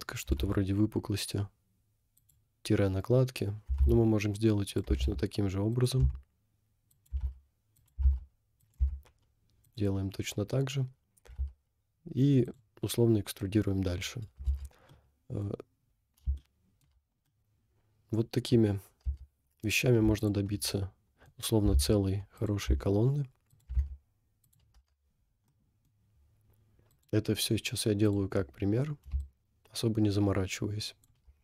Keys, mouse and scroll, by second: 0.4 e, 3.7 e, 5.0 e, 6.0 s, 7.1 e, 8.0 e, 8.9 s, 10.0-10.3 scroll down 3, 10.9 scroll down 2, 11.5 e, 14.5 Tab, 14.9 middle click, 15.6 scroll down 2, 16.4 shift+middle click, 17.1 scroll up 1, 17.2-18.7 middle drag, 19.2 Tab, 19.5 scroll up 1, 20.2 alt+click, 20.8 middle click, 21.7 e, 22.7 s, 23.9 e, 24.8 Tab, 25.1 scroll down 1, 25.5 middle click, 26.9-27.7 drag, 29.2 shift+click.